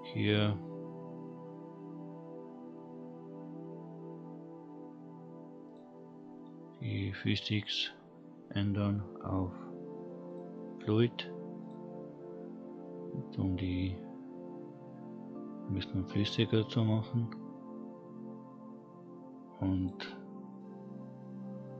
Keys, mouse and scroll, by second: 4.0-5.6 scroll down 1, 5.6 click, 7.5 click, 8.0-10.2 scroll down 2, 10.2-11.6 drag, 13.4-16.5 scroll down 1, 19.8 click.